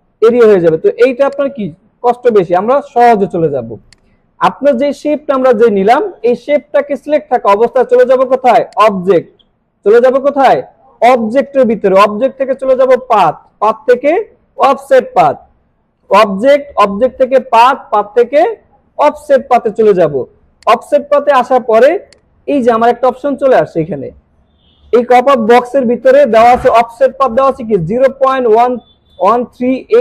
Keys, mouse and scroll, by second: 1.4-2.2 drag, 8.7 click, 20.6-25.2 drag.